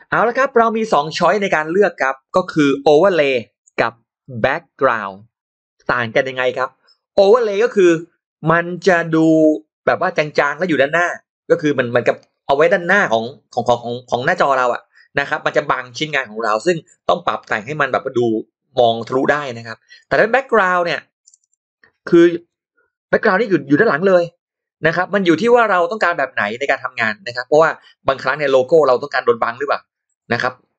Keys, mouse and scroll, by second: 1.1-3.5 typing, 2.9 shift+click, 4.1 click, 6.6 shift+x, 7.2 click, 8.3 k, 21.1 shift+right click, 21.2 shift+right click, 22.2 click, 22.3 right click, 25.4 click, 25.4 right click.